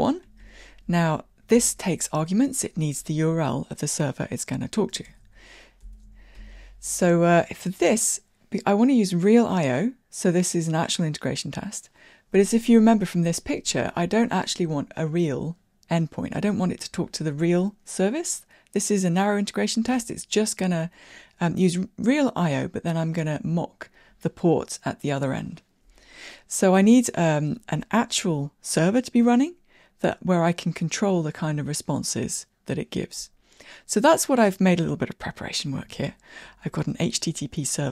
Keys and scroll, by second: 1.6 super+p, 36.1 super+b.